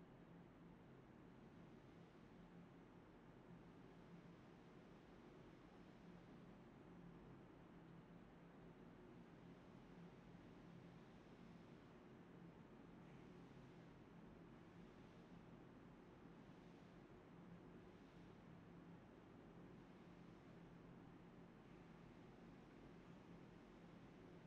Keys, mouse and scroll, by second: 0.6 alt+click, 0.8 shift+click, 1.9 alt+click, 3.7 ctrl+b, 4.0 typing, 5.4-5.8 typing, 7.5 alt+click, 7.8-9.4 typing, 8.3 shift+click, 8.4 shift+double click, 8.5 shift+click, 9.0 alt+click, 10.9 typing, 12.1 double click, 12.8 alt+click, 13.1 double click, 13.9 typing, 15.3 alt+click, 15.6 alt+click, 15.7 alt+click, 16.1 alt+click, 16.3-16.8 typing, 16.9 shift+click, 17.6 shift+click, 18.4 alt+click, 18.8 alt+click, 19.6 alt+click, 19.8 alt+click, 20.0 alt+click, 20.2 alt+click, 20.3 alt+click, 21.7 ctrl+b, 22.2 1, 22.5 double click, 22.7 shift+click, 23.7 double click.